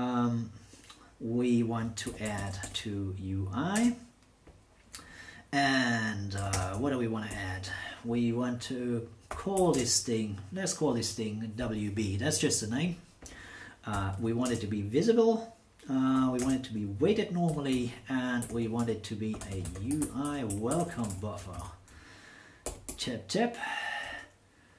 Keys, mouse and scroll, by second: 1.8-3.7 typing, 6.5 shift+space, 7.3 shift+8, 9.3 w, 9.5 b, 9.7 space, 14.1 t, 14.4 space, 16.1 1, 16.4 space, 17.7-21.6 typing, 22.6 shift+9, 22.9 shift+9.